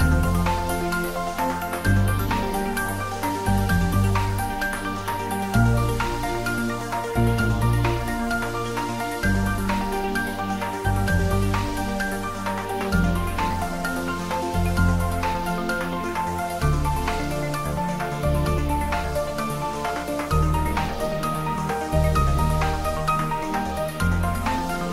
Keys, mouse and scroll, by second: 0.8 click, 1.0 ctrl+middle click, 1.9 Tab, 3.1-4.3 typing, 5.4 Return, 5.9 ctrl+middle click, 7.2 2, 7.4 click, 8.4-9.5 typing, 10.7 Return, 12.2 click, 12.4-13.5 typing, 14.5 Right, 16.1 click, 16.8-17.7 typing, 19.4 click, 19.7-21.2 ctrl+middle drag, 21.2 Tab, 22.4-23.9 typing, 23.7 click.